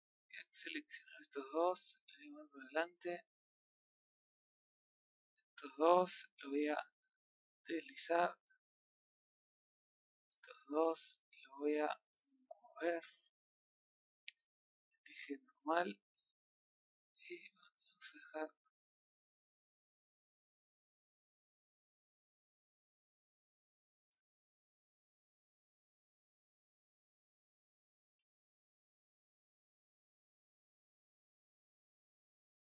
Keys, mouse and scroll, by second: 0.6 click, 4.7 shift+click, 6.8 click, 12.5 click, 15.3-16.5 drag, 20.2-21.2 middle drag, 21.2 scroll up 1, 21.7 middle click, 22.5 click, 25.6 middle click, 26.1-26.9 scroll up 2, 26.9 click, 30.1 click.